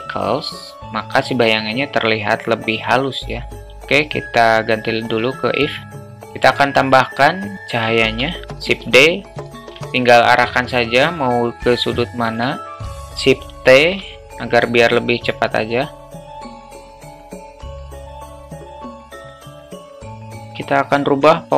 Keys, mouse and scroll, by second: 3.7-4.5 drag, 6.5 alt+middle click, 8.1 shift+d, 9.8 alt+shift+middle drag, 10.8-11.9 drag, 12.2 shift+middle drag, 12.6 alt+middle drag, 13.8 shift+t, 16.2 `, 17.2 shift+t, 18.2-18.8 alt+middle drag, 19.6 click, 20.4-21.5 drag.